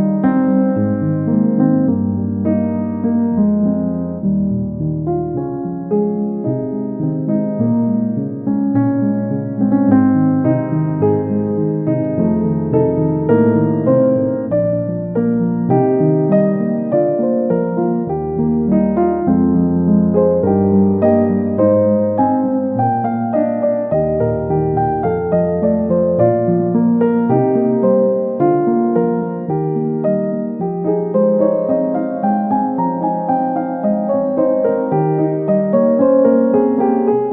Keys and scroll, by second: 18.5 Return, 32.2 \.